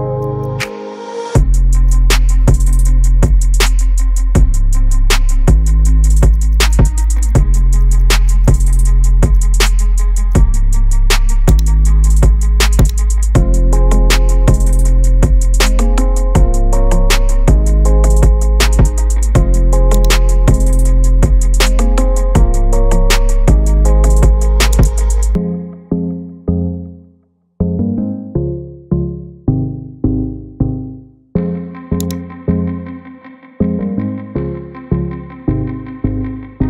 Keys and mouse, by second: 0.7 middle click, 0.9 KP_3, 1.2 KP_Decimal, 2.3 shift+middle click, 2.4 g, 3.3 shift+middle click, 3.6 middle click, 4.0 KP_1, 4.2 shift+middle click, 4.3 shift+middle click, 5.0 g, 6.3 click, 6.3-9.4 typing, 7.3 shift+middle click, 8.5 click, 9.8 middle click, 10.3 shift+middle click, 11.5 click, 12.8 click, 17.3 shift+middle click, 17.9 middle click, 20.4 shift+middle click, 22.4 Tab, 24.8-27.4 drag, 29.4 middle click, 30.3-30.8 drag, 32.1-35.3 drag, 36.2 shift+middle click.